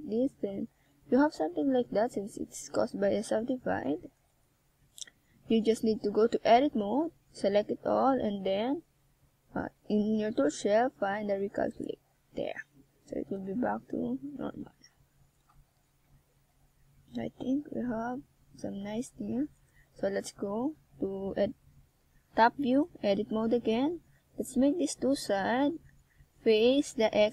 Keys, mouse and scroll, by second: 0.2 r, 0.7 click, 1.1 g, 1.8 click, 2.7 g, 3.3 click, 3.7 e, 4.5 click, 5.8 r, 6.4 click, 8.2 e, 8.9 click, 9.2 g, 10.2 click, 10.5 r, 11.7 e, 12.2 click, 12.6 g, 13.2 click, 13.8 r, 14.7 click, 15.9 e, 16.5 click, 17.5 g, 18.2 click, 18.9 r, 19.9 click, 20.5 e, 21.0 click, 21.5 g, 22.6 click, 23.0 r, 23.7 click, 26.2 click.